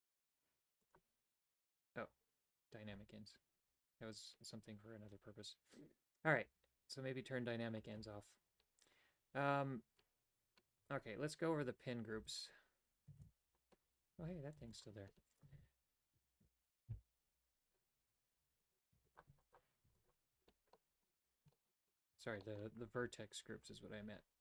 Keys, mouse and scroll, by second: 0.9 click, 11.0 Tab, 12.2 x, 13.1 shift+a, 14.2 a, 14.5 x, 15.5 shift+a, 17.4 alt+g, 17.9 Tab, 18.3 w, 18.9 w, 19.4 w, 19.8 w, 20.7 middle click, 21.1-21.4 scroll down 1, 21.5 shift+middle click, 21.8 scroll down 1, 22.2 a, 22.4 middle click, 22.8 Tab, 23.6 Tab.